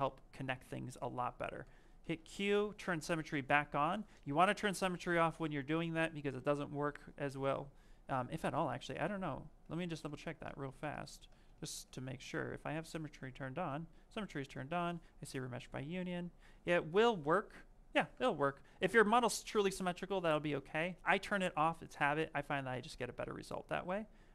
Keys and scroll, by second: 1.5 q, 6.2 s, 8.9 ctrl+z, 9.6 ctrl+shift+z, 12.7 z, 18.5 s.